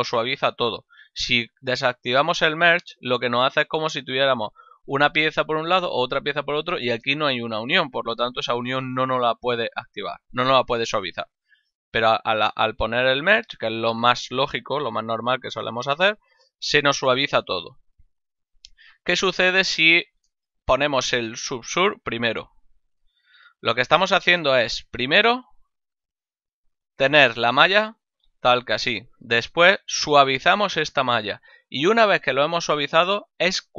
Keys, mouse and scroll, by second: 2.1 click, 11.9 click, 20.3 shift+middle click, 22.9 click, 25.2 click, 27.4 click, 29.6 click.